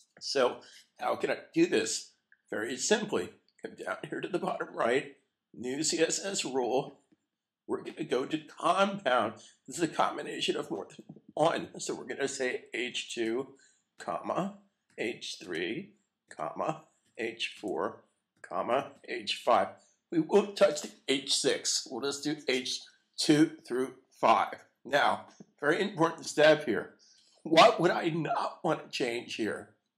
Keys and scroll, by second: 14.3-15.0 typing, 16.3-17.0 typing, 18.3-19.0 typing, 20.1-20.8 typing.